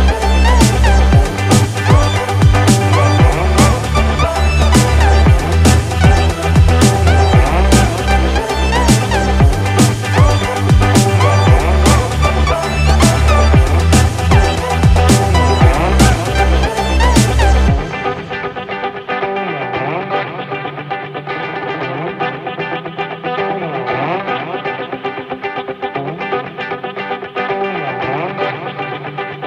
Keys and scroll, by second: 1.5 ctrl+z, 9.5 ctrl+-, 10.1 ctrl+=, 10.8 ctrl+-, 11.7 ctrl+=, 18.1 ctrl+-, 18.2 ctrl+0, 18.5 ctrl+=, 18.7 ctrl+space, 18.9 ctrl+=, 20.3 ctrl+-, 22.4 ctrl+=.